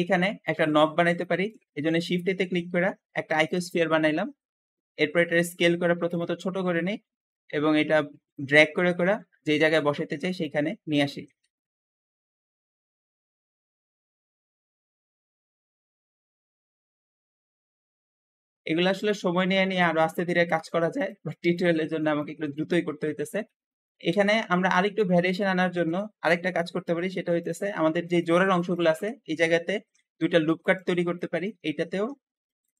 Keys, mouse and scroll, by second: 0.8 Escape, 1.0 scroll down 1, 1.1 middle click, 1.7 shift+a, 1.8 shift+a, 3.8-4.3 scroll down 4, 4.3-4.9 scroll up 3, 5.0 s, 7.2 click, 8.8 click, 10.3 click, 11.3-14.4 typing, 11.8 scroll up 3, 11.9 alt+z, 13.1-13.4 scroll up 3, 14.1 alt+z, 14.7 middle click, 15.1-15.7 scroll up 5, 15.3 shift+middle click, 15.7 shift+click, 16.5-17.4 typing, 16.7 scroll down 3, 17.8-18.5 scroll down 2, 18.5-20.9 middle drag, 20.9 shift+click, 21.5 shift+click, 21.9-23.5 shift+middle drag, 23.5 scroll up 1, 24.1 `, 25.9 Escape, 26.0-26.5 scroll up 2, 26.0 `, 26.8 Tab, 26.9 Tab, 27.3 click, 29.1 Escape, 29.7 ctrl+r, 29.8 ctrl+r, 31.1 shift+middle click, 31.8 ctrl+r, 31.8 ctrl+r.